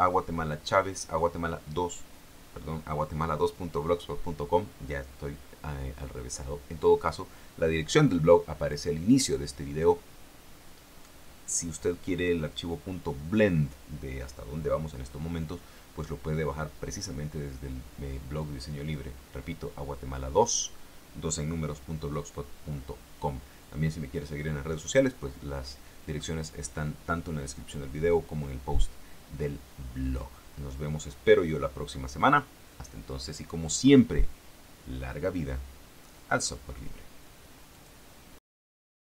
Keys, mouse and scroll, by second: 37.9 click, 39.0 click.